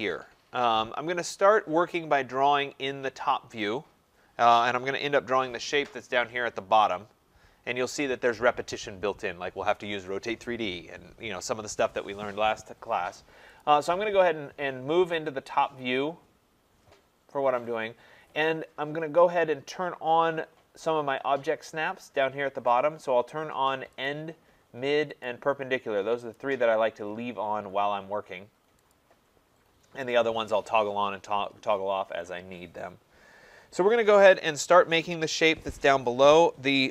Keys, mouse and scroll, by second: 13.7-18.7 drag, 24.1 click, 25.3 click, 26.4 click, 28.9 click.